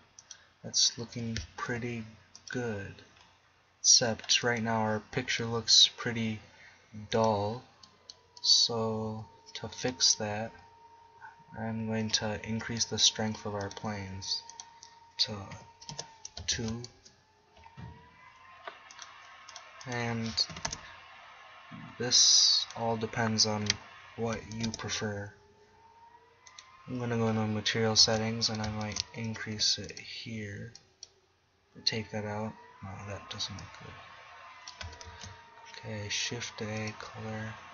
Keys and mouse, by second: 1.2 g, 12.6 z, 16.6 shift+z, 17.0 KP_0, 26.5-29.6 right drag, 29.6 g, 30.1-32.1 drag, 35.2 shift+a.